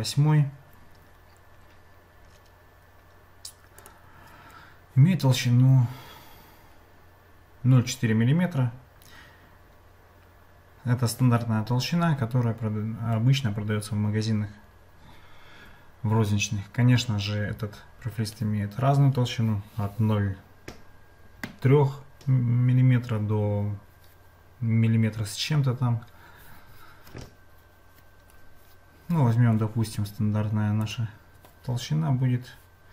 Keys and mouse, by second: 30.9-32.9 drag.